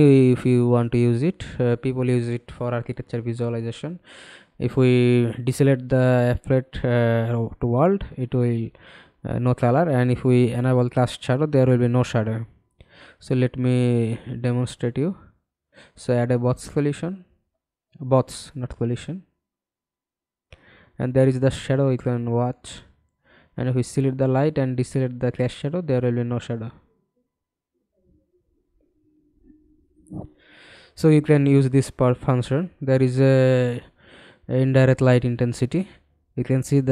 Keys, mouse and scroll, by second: 0.7-2.7 scroll down 2, 29.8-31.7 scroll down 3.